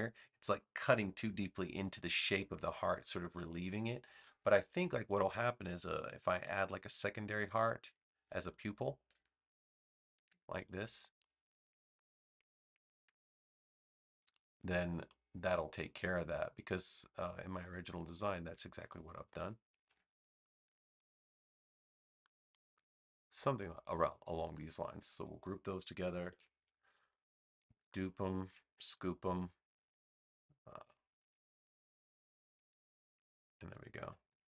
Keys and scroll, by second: 4.1 BackSpace, 6.4 super+j, 26.2 super+g, 34.2 super+-.